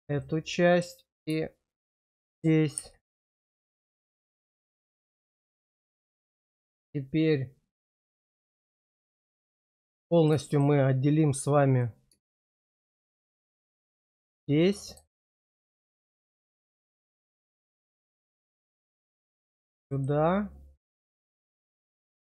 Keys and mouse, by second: 0.1 middle click, 4.6 click, 5.8 shift+click, 8.1 click, 8.9 middle click, 9.6 shift+middle click, 10.0 middle click, 10.4 shift+middle click, 14.0 ctrl+click, 14.6 middle click, 15.2 shift+middle click, 16.9 ctrl+click, 20.4 middle click, 21.7 ctrl+click.